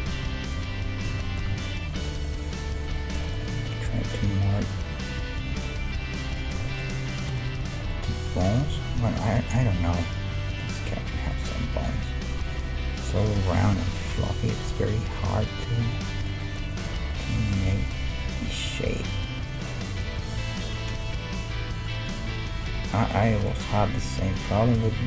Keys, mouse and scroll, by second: 0.1 a, 0.2 a, 1.1 ctrl+n, 1.5 ctrl+Tab, 2.8-4.6 drag, 2.8-5.9 middle drag, 4.2 g, 5.5 g, 6.4-11.3 middle drag, 7.3 g, 8.2-16.1 right drag, 8.8 g, 10.3 g, 11.2 g, 11.9 g, 13.4 g, 14.2 g, 15.0 g, 16.1 middle click, 16.7 right click, 17.3 g, 18.1-20.3 right drag, 19.0 g, 20.6 s, 21.4-22.9 right drag, 21.6 g, 22.2 g, 24.0 g.